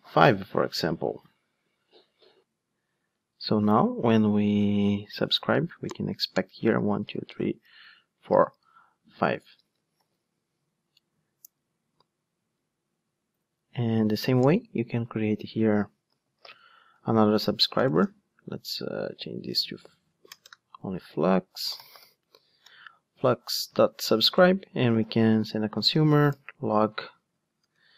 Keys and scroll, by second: 10.1 ctrl+shift+d, 16.8 Return, 25.1 Return, 27.0 super+z.